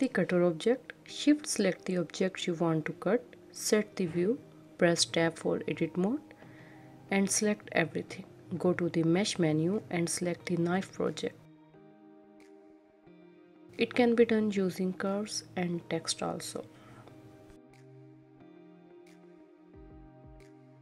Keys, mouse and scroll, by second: 1.1 shift+click, 2.3 KP_1, 5.3 Tab, 5.8 a, 6.1 a, 6.5 a, 8.1-10.5 drag, 10.5-12.2 middle drag, 12.2 Tab, 12.7 click, 12.8 KP_1, 13.1 g, 13.7 shift+click, 13.9 Tab, 14.0 a, 14.6-15.3 drag, 15.3 Tab, 15.4-15.7 middle drag, 15.7 click, 16.5 click, 16.7 click, 16.8 Tab, 16.9 scroll up 1, 17.0 middle click, 17.4 click, 17.9 shift+click, 18.1 x, 18.5 Tab, 18.6 scroll down 2, 18.7-19.7 middle drag.